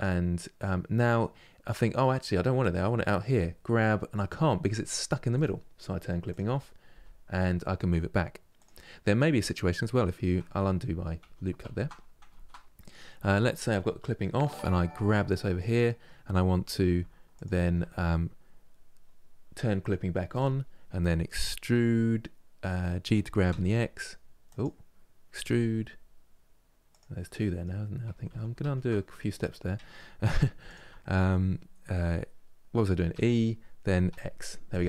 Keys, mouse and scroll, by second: 0.7-2.9 middle drag, 2.9 g, 6.0 click, 6.6 g, 8.7 scroll down 1, 10.3 ctrl+z, 10.5 ctrl+z, 12.4-14.8 middle drag, 14.8 g, 17.0 alt+click, 20.0-21.4 drag, 21.4 e, 26.9 middle click, 27.8 ctrl+z, 28.0 ctrl+z, 28.9-30.0 middle drag, 30.0 2, 30.3 alt+click, 32.8 e, 34.7-34.8 middle drag.